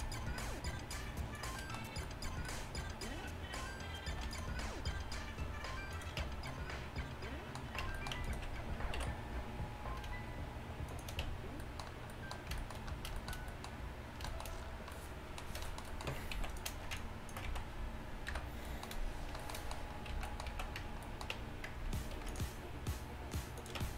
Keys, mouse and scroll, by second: 4.2 ctrl+r, 6.3 Tab, 7.9 Tab, 9.0 ctrl+b, 11.3 Tab, 16.2 Tab, 16.4 z, 17.0 click, 17.0 middle click, 17.0 right click, 17.5 z, 18.4 KP_Decimal, 20.2 z, 20.6 z, 20.8 Tab, 21.4 Tab, 22.2 ctrl+r, 23.8 Tab.